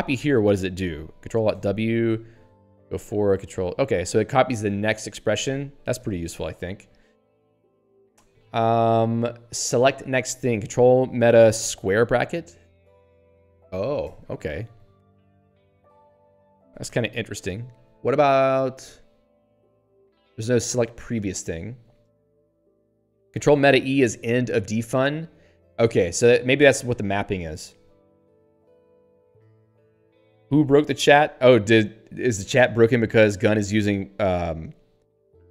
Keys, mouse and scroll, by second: 1.5 ctrl+alt+w, 2.4 ctrl+n, 3.3 ctrl+y, 6.0 ctrl+/, 12.8 ctrl+alt+], 15.0 ctrl+alt+], 21.5 Escape, 29.0 Escape.